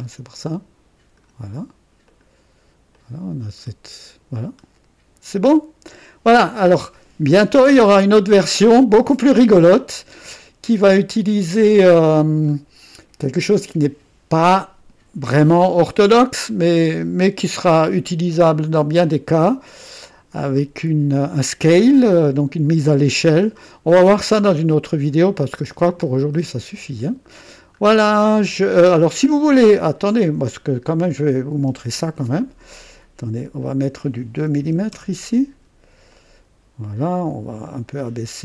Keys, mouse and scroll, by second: 2.1 click, 2.9-6.8 drag, 3.6-4.6 typing, 9.8 right click, 11.1-12.7 drag, 23.3-24.6 drag, 25.2-27.4 drag, 27.8 scroll up 2, 28.4 scroll down 2, 30.9 click, 33.4 click, 34.6 KP_2, 34.9 KP_Enter, 36.1 click, 37.6 click, 37.9 typing.